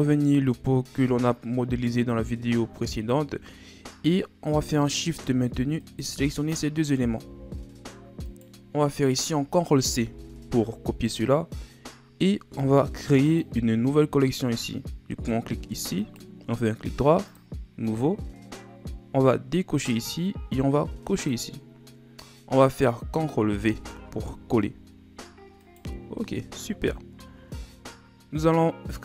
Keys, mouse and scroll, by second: 2.6-4.8 scroll up 4, 4.8 right click, 5.9 shift+right click, 7.3 g, 10.0 ctrl+c, 13.3 click, 16.0 right click, 17.4-19.1 right drag, 19.8 click, 21.2 click, 23.7 ctrl+v, 25.7 right click, 27.3 scroll up 3, 27.8-28.7 middle drag, 28.7-29.0 scroll up 3.